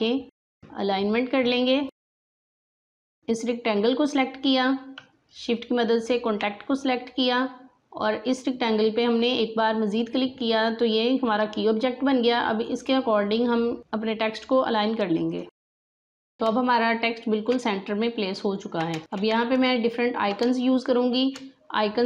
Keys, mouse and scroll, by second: 2.8 alt+scroll up 1, 2.9 space, 3.0 click, 6.0 shift+click, 15.2 click, 16.2 alt+scroll down 1, 16.4 space, 16.9 scroll down 1, 18.5 alt+scroll down 1, 18.9 space, 19.0 click, 19.0 space, 19.3 alt+scroll down 1, 20.4 space, 20.5 click, 20.9 space.